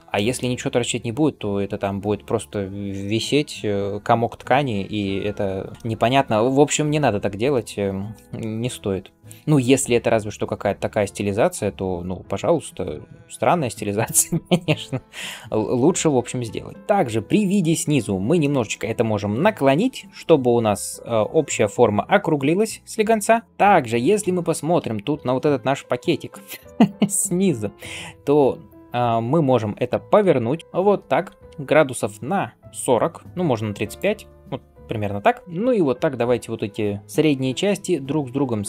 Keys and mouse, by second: 0.0-13.0 shift+middle drag, 8.1 KP_1, 9.3 s, 15.0-24.4 middle drag, 15.0 g, 16.7 r, 19.7 r, 30.6 r, 35.4 click, 37.6 g.